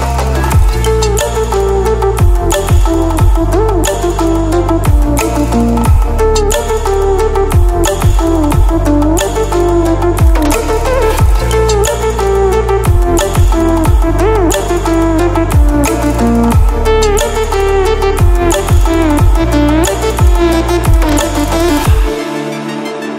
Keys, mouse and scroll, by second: 8.1-11.5 drag, 13.9-14.5 scroll up 1, 15.7 click, 20.6 ctrl+alt+scroll down 1, 21.8-22.1 ctrl+alt+scroll down 1, 22.1 ctrl+alt+scroll up 2.